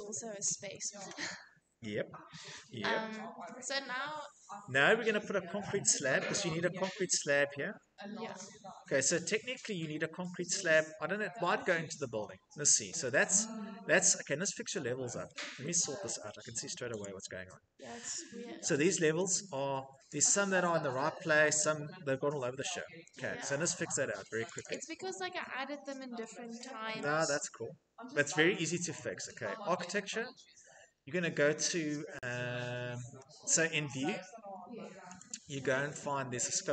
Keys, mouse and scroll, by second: 0.1 Escape, 0.2 Escape, 2.4 shift+middle click, 2.8 middle click, 2.9 middle click, 4.7 shift+middle click, 5.3 Escape, 13.4 middle click, 13.4 scroll, 15.4 scroll, 16.8 click, 16.8-17.5 scroll, 17.5-17.9 scroll, 18.1 Escape, 19.1 click, 19.5-19.9 scroll, 20.6 scroll, 21.2 Escape, 22.2 Escape, 24.1 scroll, 24.4 click, 24.5 click, 28.8 click, 35.0 click.